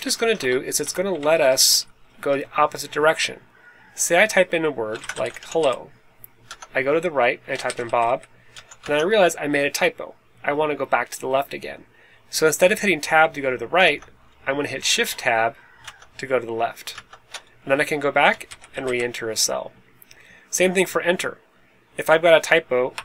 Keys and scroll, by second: 0.3 BackSpace, 0.8 Left, 1.0 Right, 1.2 Up, 1.4 Up, 1.6 Up, 1.7 Up, 1.9 Up, 2.0 Up, 4.7-6.0 typing, 6.4 Tab, 7.3-9.0 typing, 13.8 Tab, 15.7 shift+Tab, 16.9 shift+Tab, 18.2-19.3 typing, 22.9 Return.